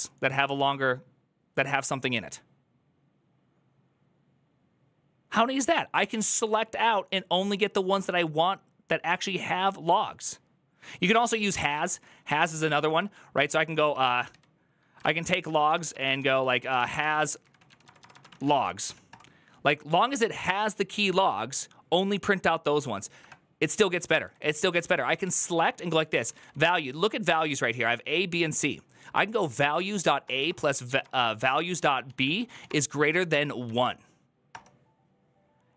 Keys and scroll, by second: 11.5 ctrl+Left, 11.7 ctrl+Left, 12.1 Right, 12.4 Right, 12.6 Left, 12.9 ctrl+w, 13.2 ctrl+w, 13.5-19.2 typing, 23.9 Left, 24.0 Left, 24.2 Left, 25.0 ctrl+w, 25.2 ctrl+w, 25.5-26.7 typing, 29.6-33.5 typing, 34.3 Return.